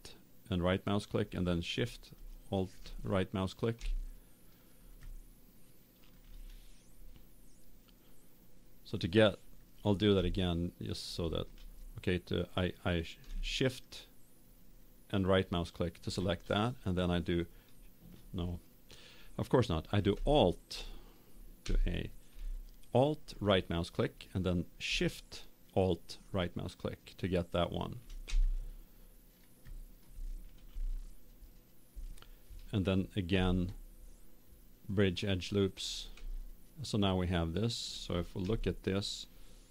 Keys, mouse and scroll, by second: 2.1-3.9 right drag, 3.9-6.6 middle drag, 10.3-12.9 middle drag, 12.9-15.4 right drag, 20.3-22.1 right drag, 21.6 a, 23.2 right click, 26.2-27.9 right drag, 28.4-31.6 middle drag, 33.3 w, 36.4 middle click, 36.6 middle click, 36.9 middle click, 37.6 middle click, 38.5 KP_0.